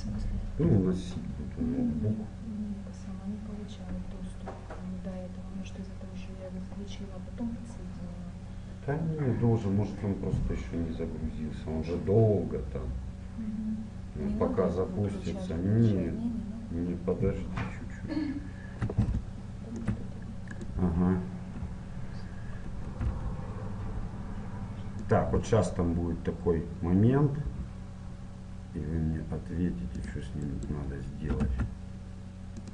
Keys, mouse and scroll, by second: 19.2-20.6 middle drag, 20.6-22.5 right drag, 22.8 e, 25.3 e, 30.5-32.2 right drag, 31.3 e.